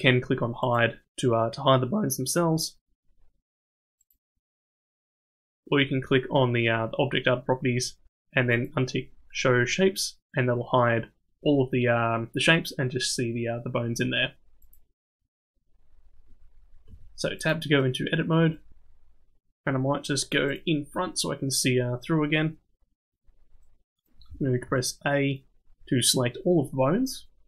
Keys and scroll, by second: 16.9 Tab, 24.3 a.